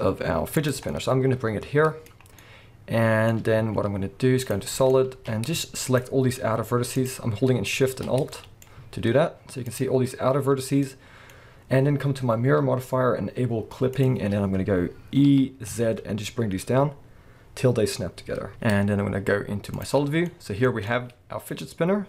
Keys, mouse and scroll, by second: 0.7 click, 0.9-5.8 middle drag, 3.6 z, 4.9 scroll up 2, 5.1 alt+a, 5.8 alt+shift+click, 6.9 click, 8.1 scroll down 1, 8.3-13.9 middle drag, 8.8 z, 11.3-13.8 scroll up 1, 13.9 click, 14.4-15.3 scroll up 1, 15.3 e, 18.5 z, 20.1 scroll down 1, 20.3-22.0 middle drag, 20.7 alt+a.